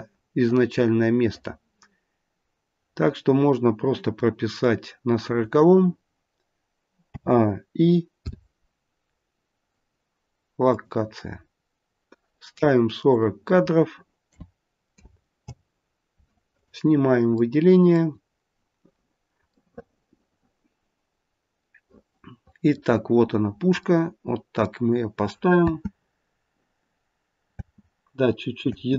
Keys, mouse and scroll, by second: 6.9 a, 8.1 i, 11.5-12.0 scroll down 1, 13.0 click, 16.5 click, 17.3 middle click, 18.9-19.6 scroll up 2, 19.4 middle click, 19.6 middle click, 21.7 middle click, 23.8 middle click, 25.6 space, 27.4 space, 28.6 space.